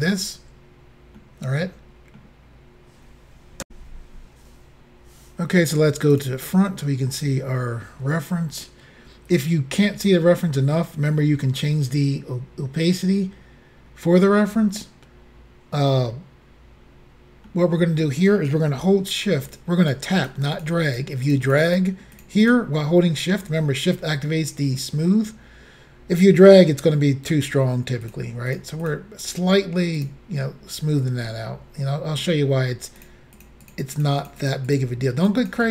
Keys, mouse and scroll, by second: 1.2 middle click, 3.6 Insert, 6.2 click, 8.5-9.7 scroll up 1, 17.5 middle click, 19.5 shift+click, 19.9 shift+click, 20.0 shift+double click, 20.3 shift+click, 20.6 shift+click, 20.7 shift+double click, 20.9 shift+click, 21.3 shift+click, 21.4 shift+double click, 21.5 shift+click, 21.7 shift+click, 21.8 shift+double click, 22.2 shift+click, 22.5 shift+click, 22.5 shift+double click, 28.1 shift+click, 28.9 shift+click, 30.0 shift+click, 31.3 middle click, 31.7-32.3 scroll down 1, 33.1 shift+click, 33.4 shift+click, 33.7 shift+click, 34.1 shift+double click, 34.3 shift+click, 34.6 shift+double click, 34.7 shift+click.